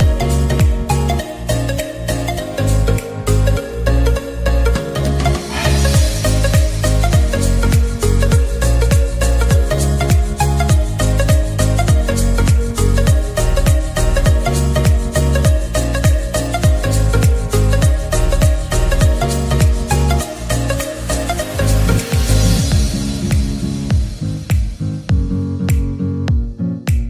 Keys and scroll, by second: 10.3-11.5 typing, 13.9-14.7 typing, 16.3-16.7 typing, 17.9 typing, 18.6 Return.